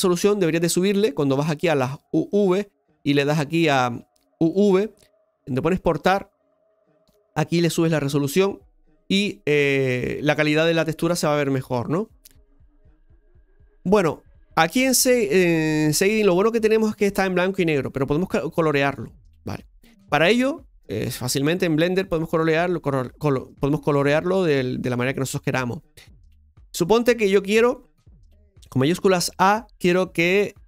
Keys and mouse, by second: 2.4-6.2 drag, 14.0 click, 14.9-18.1 middle drag, 19.4 middle click, 20.9-23.2 drag, 23.2-24.8 middle drag, 26.5-28.7 middle drag.